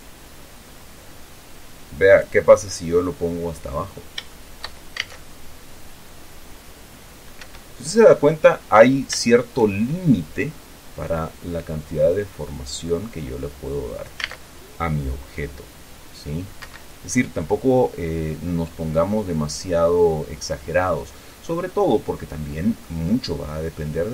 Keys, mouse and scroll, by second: 2.8-3.1 scroll down 2, 3.3-4.3 drag, 4.3-4.7 scroll down 3, 4.7 shift+click, 5.1 shift+scroll down 2, 5.4 alt+a, 7.8 Escape, 8.6-9.2 scroll up 4, 9.2-9.6 scroll down 3, 9.6 shift+click, 10.1-10.6 shift+scroll up 3, 11.4-14.6 drag, 14.6 alt+a, 16.9 Escape, 18.1-19.0 scroll down 1, 19.0-22.0 drag, 22.0 middle click, 22.6 click, 23.3-23.8 scroll up 2.